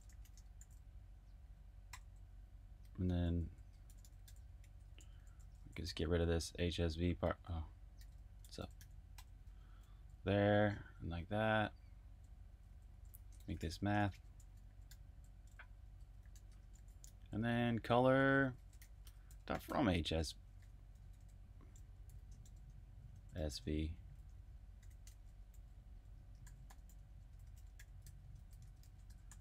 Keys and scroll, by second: 0.0-10.4 typing, 4.6 alt+v, 11.9-26.4 typing.